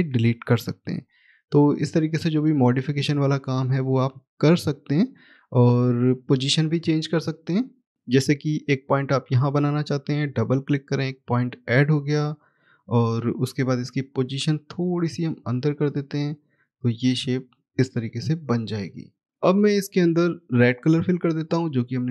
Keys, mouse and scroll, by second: 1.0 Delete, 1.1-2.0 scroll down 1, 2.0 middle click, 4.2 middle click, 4.3 click, 6.6 middle click, 10.0 click, 10.2 double click, 13.6 click.